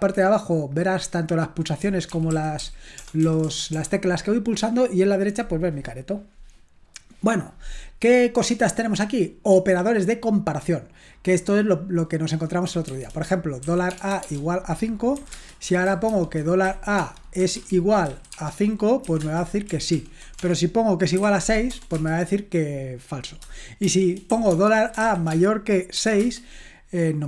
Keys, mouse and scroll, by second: 2.1-3.7 typing, 12.9-19.2 typing, 20.0 ctrl+p, 20.4-22.2 typing, 23.9-26.2 typing.